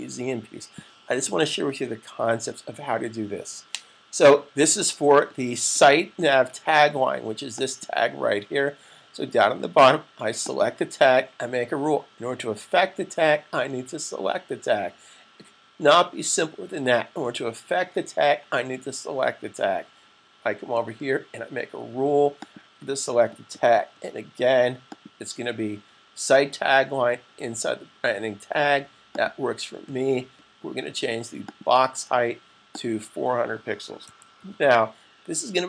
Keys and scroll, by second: 33.6-35.0 typing.